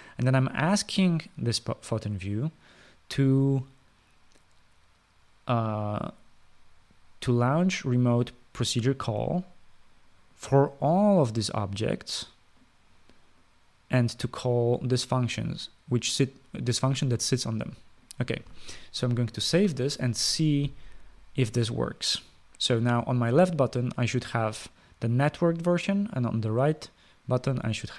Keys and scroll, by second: 20.2 ctrl+s.